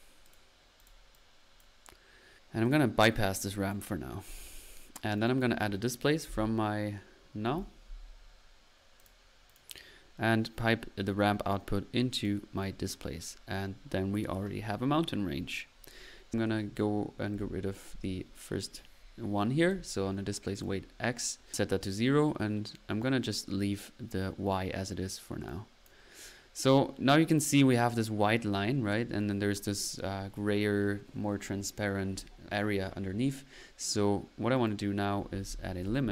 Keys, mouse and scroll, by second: 0.3 click, 0.9 click, 1.1 click, 2.6-3.0 drag, 3.1 middle click, 3.5 click, 5.2 right click, 6.0-7.5 typing, 9.0 click, 9.5-9.9 drag, 10.7 drag, 11.0-12.5 drag, 13.1 middle click, 19.6-20.1 drag, 20.5-21.0 drag, 24.1 middle click, 25.5 click, 33.5-34.0 middle drag, 34.5 right click, 35.5-36.1 typing.